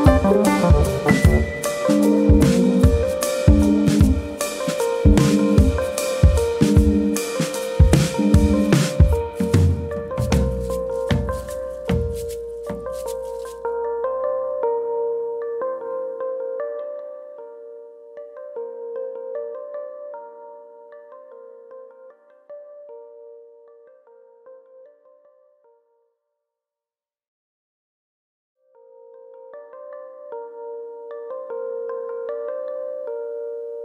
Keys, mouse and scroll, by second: 0.3 ctrl+KP_Add, 0.4 ctrl+KP_Add, 1.5 r, 5.8 right click, 6.1 middle click, 6.5 Tab, 6.7 scroll down 3, 6.9 middle click, 7.6-8.3 scroll down 1, 8.3 KP_1, 8.8-10.1 scroll up 7, 9.5 shift+middle click, 10.3 click, 12.1-12.4 scroll up 2, 12.8 click, 13.8 click, 17.7 click, 21.9 click, 23.1-23.9 scroll up 1, 23.9 click, 25.2 click, 26.9 ctrl+z, 27.8 click, 29.5 click, 31.6 click, 32.6-33.4 scroll down 3, 32.9 middle click, 33.4 shift+middle click.